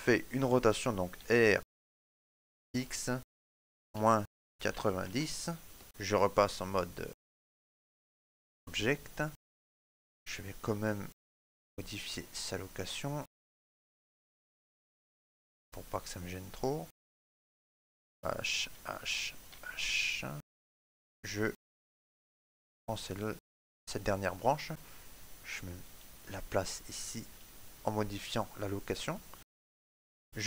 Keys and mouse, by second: 1.0 r, 5.8 middle click, 5.8 click, 6.1 Tab, 6.5 middle click, 9.6 middle click, 9.6 right click, 11.2 click, 13.5 middle click, 13.5 click, 15.0 right click, 15.5 middle click, 16.6 right click, 17.7 h, 18.1 right click, 18.4 h, 18.9 right click, 19.3 h, 20.6 right click, 21.1 shift+middle click, 23.4 click, 25.9 shift+middle click, 26.2 middle click, 26.8 shift+middle click.